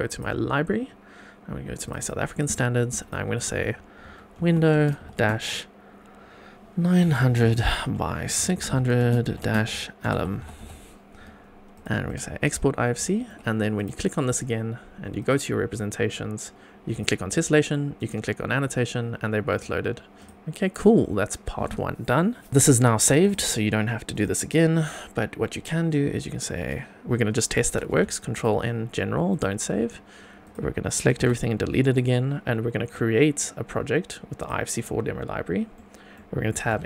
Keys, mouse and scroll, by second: 12.6 scroll up 1, 12.7 scroll down 1, 13.0 shift+middle click, 13.7 click, 15.2 click, 16.9 click, 17.9 click, 19.4 click, 20.2 click, 22.5 click, 23.2 click, 24.1 click, 27.8 ctrl+n, 30.4 click, 31.0 a, 31.2 x, 34.8 click, 35.7 middle click, 36.7 n.